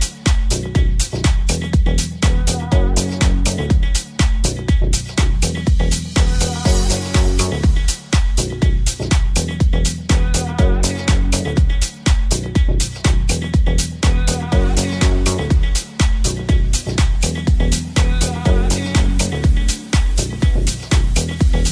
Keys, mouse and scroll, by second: 0.4-18.5 ctrl+middle drag, 0.4 s, 1.0 r, 2.8 g, 7.5 g, 7.5 r, 9.0 g, 13.0 g, 13.0 r, 18.6 ctrl+middle click, 19.9 n, 20.5 n, 20.8 ctrl+middle click.